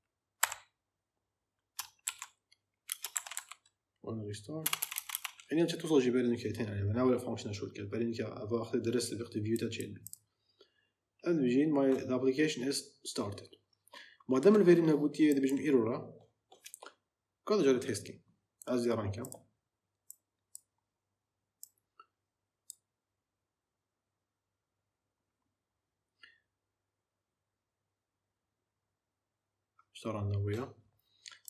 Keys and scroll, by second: 0.3 n, 1.9-4.5 typing.